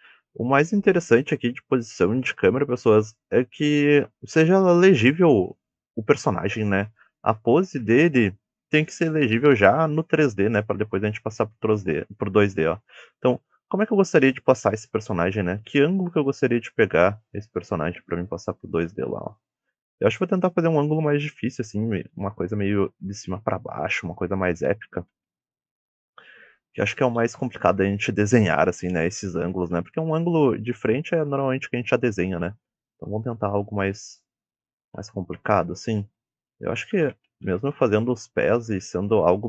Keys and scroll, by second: 7.1 d, 9.7 a, 15.5 d, 22.1 w, 23.8 d, 24.6 s, 25.3 d, 27.0 w, 27.6 d, 29.7 s, 30.6 d, 31.4 w, 32.8-33.9 typing, 34.9 s, 36.0 d, 36.8 s, 38.5 w.